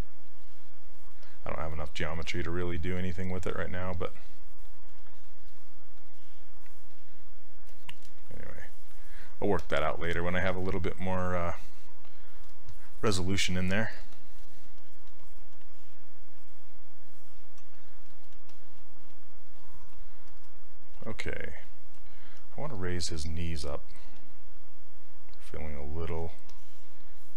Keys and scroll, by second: 13.5 s, 20.9 s, 22.4 s, 23.4 s.